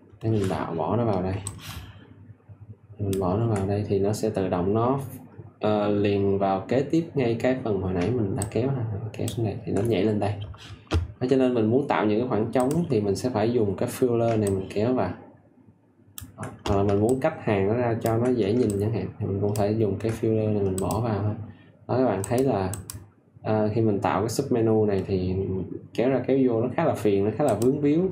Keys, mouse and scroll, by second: 1.4 ctrl+alt+click, 8.3 ctrl+alt+click, 14.4 ctrl+alt+click, 18.6-23.7 ctrl+alt+drag.